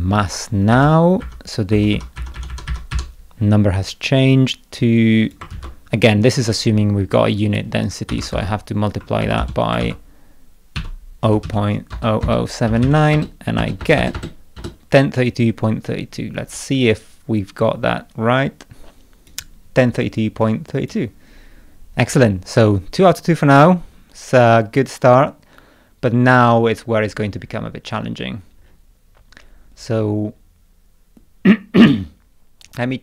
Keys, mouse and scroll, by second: 4.8 click, 5.5 ctrl+c, 7.2 click, 8.4 ctrl+v, 9.8 ctrl+v, 16.9-19.3 drag, 20.5 click, 23.0-26.4 drag, 26.8-27.7 scroll up 6, 27.9 scroll up 2, 28.6 scroll up 1, 29.4 scroll up 2, 29.7-30.6 scroll down 2, 31.0 scroll down 1.